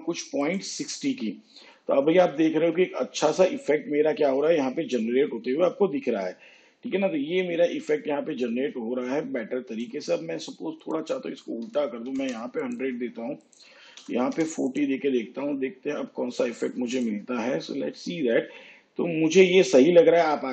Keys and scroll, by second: 11.8 1, 12.1 0, 14.0 4, 14.4 0.